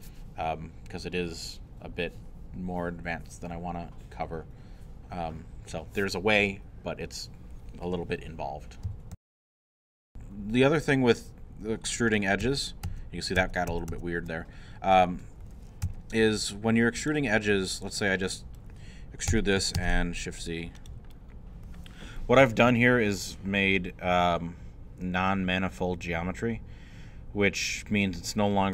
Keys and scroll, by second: 9.1 super+., 12.4 ctrl+z, 15.8 2, 19.3 e, 19.7 shift+z.